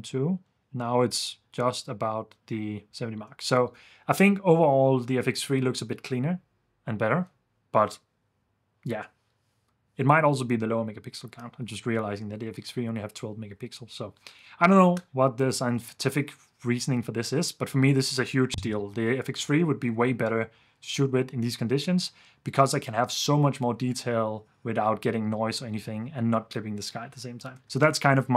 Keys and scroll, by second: 2.9 super+d, 3.3 super+f, 27.8 super+s.